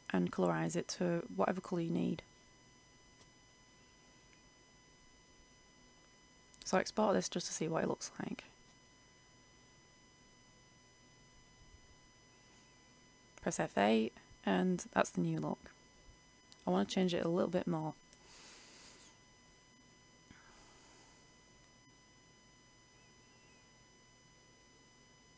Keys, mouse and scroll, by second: 6.1 ctrl+s, 8.0 click, 8.9 ctrl+shift+e, 12.2 click, 12.9 F8, 14.8-20.6 drag, 21.8 ctrl+s, 22.9 click, 23.5 ctrl+shift+e, 24.0 ctrl+shift+Return.